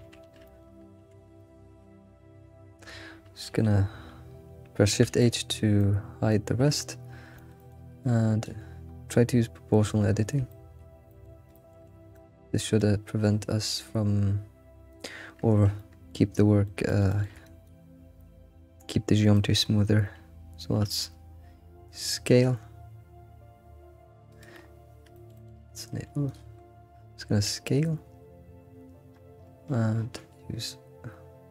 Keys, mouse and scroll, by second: 0.2 ctrl+z, 0.4-1.0 shift+middle drag, 1.4 alt+click, 5.6 scroll down 2, 5.8-7.4 middle drag, 6.0 shift+h, 8.4 ctrl+click, 8.8 scroll up 2, 10.1 scroll up 2, 10.5 shift+middle click, 11.5 shift+middle click, 11.8-12.3 scroll down 1, 12.3-14.9 middle drag, 14.9 click, 15.7 middle click, 16.8 middle click, 17.1 alt+middle click, 17.6 ctrl+click, 18.2-19.7 middle drag, 19.7-22.3 scroll up 2, 22.3 s, 25.3 alt+middle click, 26.2 click, 27.3 s.